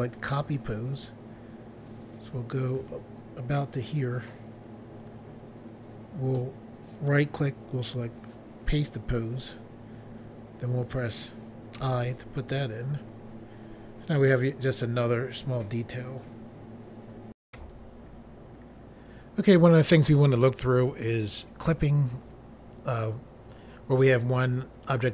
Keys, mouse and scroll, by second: 0.2 click, 0.3 click, 1.9 click, 7.0 right click, 7.2 right click, 8.7 click, 8.8 click, 11.8 i.